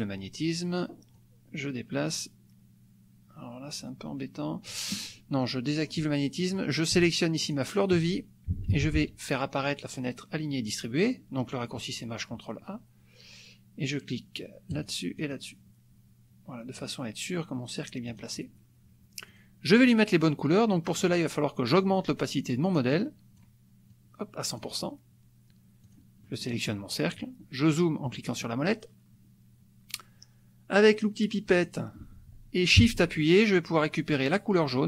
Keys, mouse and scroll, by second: 1.2-5.0 drag, 5.8 click, 7.5 shift+click, 8.8 ctrl+shift+a, 14.8 click, 15.2 click, 18.1 click, 19.3 click, 21.0 click, 22.9 click, 23.9 click, 25.9 click, 26.3 middle click, 28.0 click, 31.5 click.